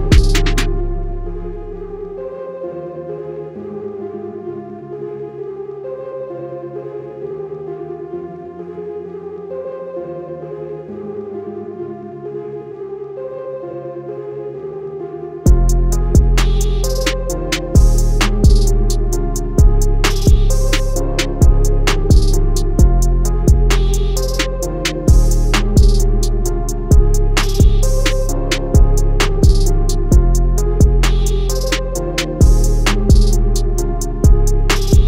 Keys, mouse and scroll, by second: 0.1 scroll up 1, 2.0 click, 2.7 click, 3.3 scroll down 1, 4.0 alt+scroll up 1, 4.4 click, 5.1-5.5 scroll down 2, 6.2 scroll up 1, 7.4 click, 8.0-8.5 scroll up 2, 8.5-8.9 scroll down 2, 9.7 click, 10.1 click, 11.3 scroll up 1, 11.8 scroll down 1, 12.7 scroll up 1, 14.0 click, 14.8 click, 15.6 click, 16.1 scroll down 1, 17.6 scroll down 1, 18.2 scroll up 1, 18.6 scroll down 1, 21.2 click, 22.8 scroll down 1, 23.3 scroll up 1, 31.1 a, 31.5 click, 33.4 i, 34.1 click.